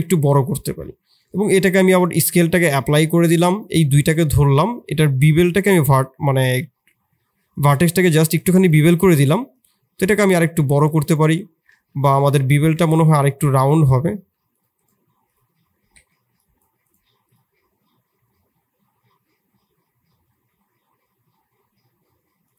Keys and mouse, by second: 0.8 Tab, 1.2 ctrl+a, 2.6 Tab, 4.3-11.7 drag, 11.7 ctrl+z, 12.0 ctrl+z, 13.7 click, 14.0 s, 15.2-16.6 drag, 17.0-22.5 drag.